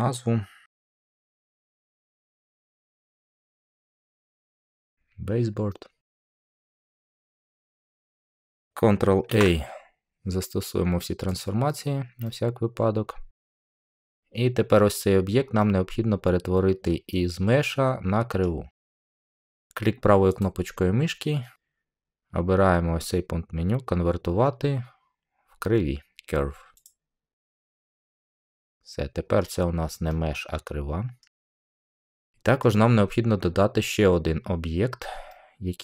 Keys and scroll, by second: 0.7-2.6 typing, 3.2 Return, 9.2 ctrl+a.